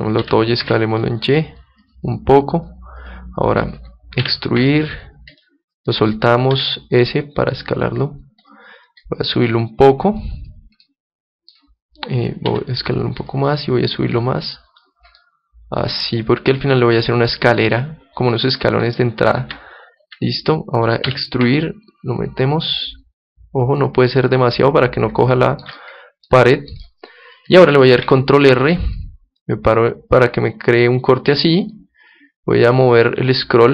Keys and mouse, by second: 0.2 s, 1.2 s, 2.0-3.0 drag, 3.0 middle click, 3.8-4.8 right drag, 4.2 e, 5.4-7.2 right drag, 6.5 s, 8.6-11.2 drag, 10.8 middle click, 11.0-12.8 middle drag, 12.5 s, 13.3-16.1 drag, 15.2-17.2 middle drag, 17.7-19.6 middle drag, 19.4 Tab, 20.0 Tab, 21.1 e, 22.0 e, 24.0-25.8 drag, 25.7-28.2 middle drag, 28.0 ctrl+r.